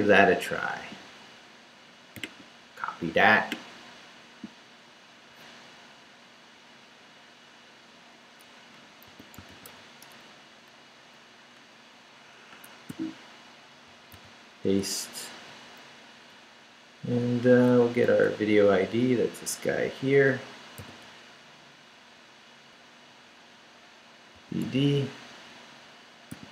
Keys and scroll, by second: 8.9-10.2 typing, 12.5 Escape, 12.9 o, 13.9 super+o, 14.1 super+v, 15.3 super+Up, 15.9 Up, 17.8 Left, 20.8 v, 21.0 Left, 22.1 Left, 24.4 d, 25.3 Down.